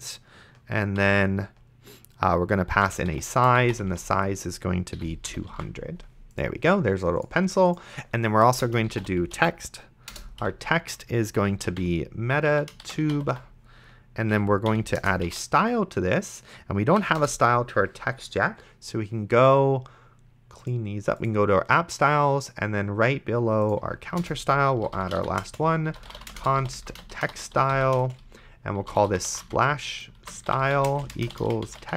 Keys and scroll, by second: 1.0 ,, 2.5-4.2 typing, 5.0 End, 5.3 ,, 5.8 ctrl+s, 8.5 Return, 8.8-16.0 typing, 10.1 Return, 14.3 Right, 17.0 Down, 17.2 Return, 24.5 Return, 24.5-31.9 typing.